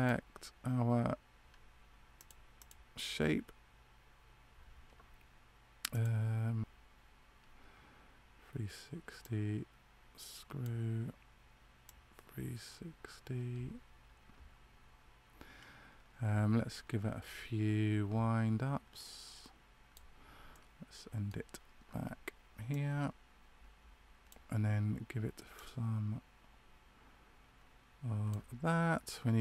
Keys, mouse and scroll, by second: 6.6 click, 9.1 click, 20.4 middle click, 22.6 click.